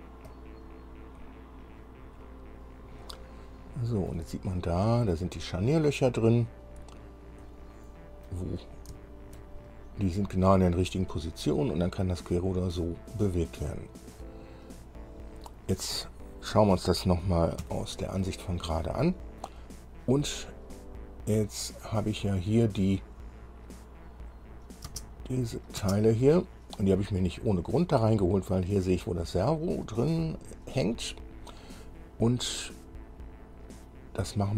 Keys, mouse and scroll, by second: 0.5 click, 3.3-4.5 middle drag, 5.0-6.7 drag, 6.9-7.3 scroll up 1, 7.7 click, 8.8 scroll down 1, 9.2 shift+click, 10.0-10.5 shift+scroll up 1, 13.4-13.8 scroll down 2, 14.0-16.3 middle drag, 17.8 KP_1, 19.6 scroll up 2, 24.7 click, 25.1 space, 25.6 click, 26.0 space, 30.7-31.2 scroll up 2, 32.8-34.3 middle drag.